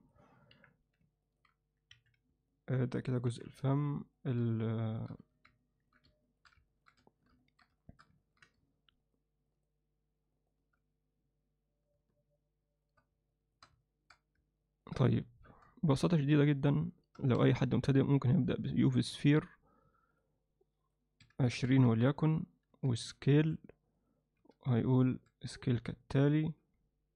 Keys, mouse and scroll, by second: 0.6 KP_1, 1.3 ctrl+middle click, 2.0 KP_Divide, 2.5 ctrl+alt+middle click, 3.4 KP_1, 4.2 ctrl+middle click, 4.9 alt+shift+middle click, 5.2 z, 5.6 ctrl+alt+middle click, 6.3 shift+middle click, 6.7 middle click, 7.1 shift+middle click, 7.4 ctrl+alt+middle click, 7.8 alt+shift+middle click, 8.2 ctrl+alt+middle click, 13.4 shift+click, 13.9 alt+shift+middle click, 14.7 ctrl+middle click, 17.4 shift+a, 20.1 click, 21.2-22.7 drag, 22.7 s, 23.4 s, 24.4 r, 25.1 s, 26.6 g.